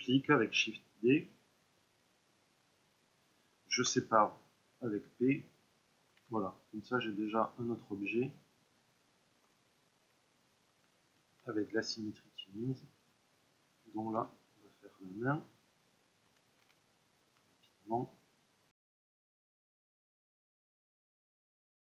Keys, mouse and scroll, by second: 0.5 shift+d, 1.5-6.1 right drag, 3.8 p, 6.1 Tab, 6.8-8.3 drag, 8.3-10.5 middle drag, 10.5 Tab, 11.6-14.1 drag, 14.1 e, 15.0 click, 16.2 s, 17.6 click, 18.7 click, 18.8 middle click, 19.0 click, 19.0 ctrl+shift+middle click, 19.2 click, 19.5 ctrl+middle click, 19.7 Tab, 19.8 Tab, 19.8 click, 20.1 ctrl+r, 20.6 ctrl+Tab, 20.8 click, 21.1 ctrl+Tab, 21.3 click, 21.4 ctrl+Tab, 21.6 middle click, 21.7 ctrl+e.